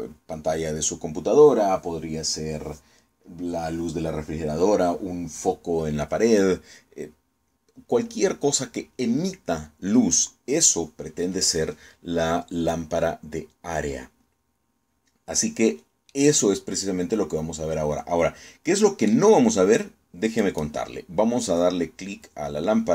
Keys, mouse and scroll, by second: 16.7-19.9 middle drag, 21.1 right click.